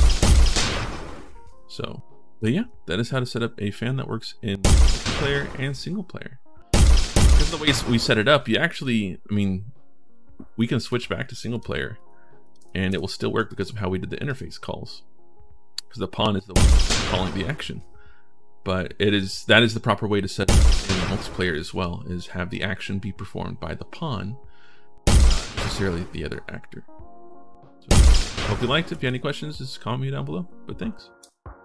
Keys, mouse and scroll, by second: 0.0 right click, 2.0-2.7 typing, 4.4 right click, 6.5 right click, 6.9 right click, 8.5 right click, 10.7 click, 11.3 click, 11.7 click, 12.2 click, 13.3 click, 14.1 right click, 14.3 w, 16.3 right click, 20.3 right click, 24.9 right click, 27.7 right click, 27.9-29.2 typing.